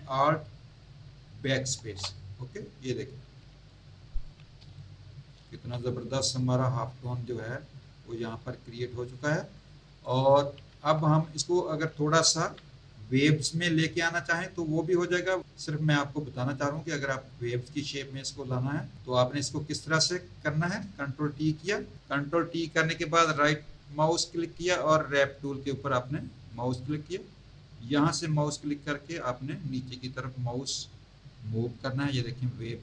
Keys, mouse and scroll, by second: 1.7 alt+BackSpace, 3.2 z, 3.6 alt+click, 4.1 alt+click, 4.6 space, 4.7 click, 5.4 z, 5.8 click, 6.5 click, 7.6-8.2 scroll up 2, 9.5 alt+click, 10.6 Tab, 12.4 v, 21.4 ctrl+t, 23.2 right click, 26.0 click, 28.1 click.